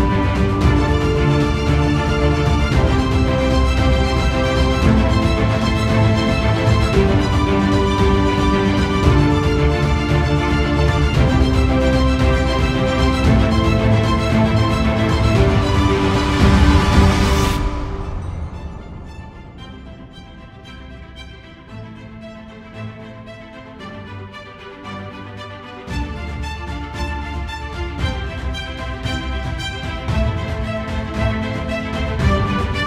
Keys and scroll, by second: 17.2 ctrl+0.